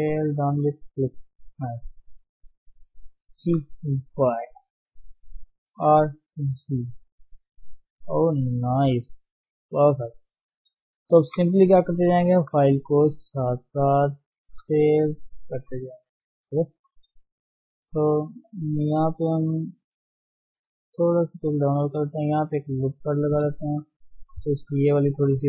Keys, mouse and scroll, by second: 0.7 g, 1.5 KP_3, 2.5 shift+z, 2.7-3.0 scroll down 2, 3.4 g, 5.8 r, 7.3-8.1 scroll down 5, 8.2 scroll down 2, 8.5-10.9 middle drag, 10.9 scroll down 1, 11.2 KP_1, 12.9 ctrl+shift+s, 13.6 ctrl+shift+s, 14.0 ctrl+shift+s, 14.5 ctrl+shift+s, 14.8 ctrl+shift+s, 15.9 shift+middle click, 16.0-18.3 scroll up 9, 16.5 shift+middle click, 16.7 Tab, 17.3 shift+middle click, 17.8 shift+z, 18.3 shift+middle click, 18.5-18.9 scroll up 1, 18.9 shift+middle click, 19.2-20.2 scroll up 1, 20.2 g, 20.9 s, 21.8 shift+middle click, 22.1-23.0 scroll up 1, 23.0 ctrl+r, 23.6 shift+z, 24.0-24.4 scroll down 3, 24.4 s.